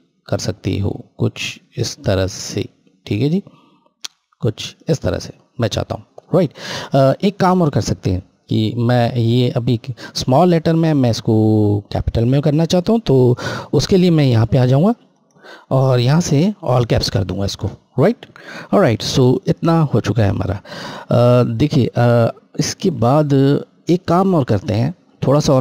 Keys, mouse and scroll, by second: 14.7 click, 18.6-18.9 scroll down 1, 22.8 scroll down 1, 24.2 click.